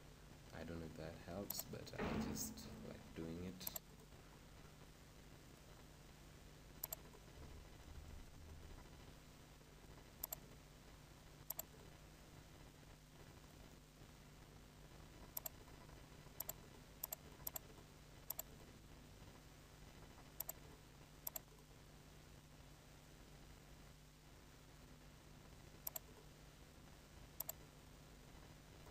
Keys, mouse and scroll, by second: 5.6 click, 5.7-9.0 right drag, 11.9-13.6 drag, 13.6-21.3 right drag, 21.3-23.0 drag.